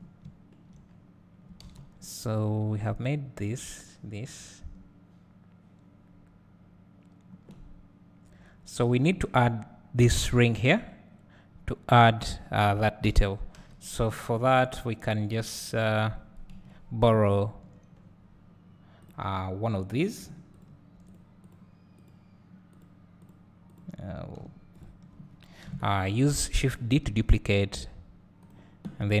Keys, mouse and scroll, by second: 0.2 `, 9.0 middle click, 15.5 click, 16.5 KP_Decimal, 18.1-19.1 scroll up 2, 19.1 click, 20.6 shift+click, 21.2 click, 22.1 click, 22.8 click, 23.8 click, 24.8 shift+click, 25.7 KP_7, 27.1 shift+d, 28.4-29.2 drag.